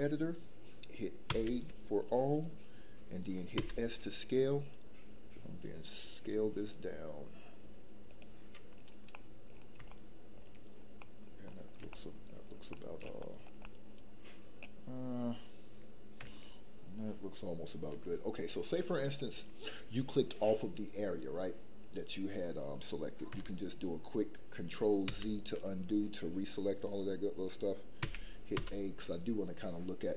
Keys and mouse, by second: 1.2 a, 3.5 s, 8.0 click, 9.1 middle click, 9.8 shift+middle click, 11.0 middle click, 11.9 shift+middle click, 12.7 middle click, 13.2 shift+middle click, 13.6-14.6 middle drag, 25.1 ctrl+z, 28.0 a, 28.5 s.